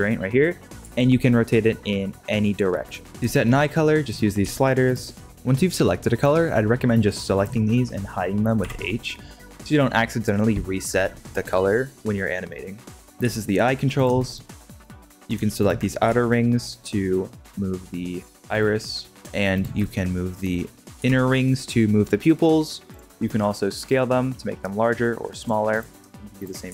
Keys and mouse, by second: 0.8 r, 7.0-7.4 drag, 8.5 h, 12.9 shift+middle drag, 13.2 g, 14.8 drag, 15.0 middle click, 15.5 shift+middle click, 16.0 g, 18.2 g, 21.0 g, 23.7 s, 26.6 s.